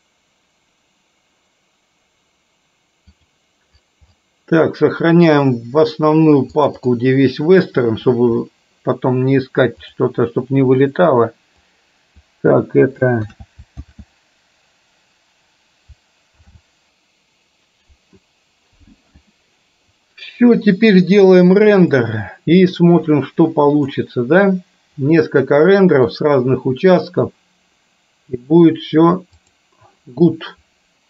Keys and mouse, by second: 22.0-24.0 drag, 25.4 middle click, 29.5 click.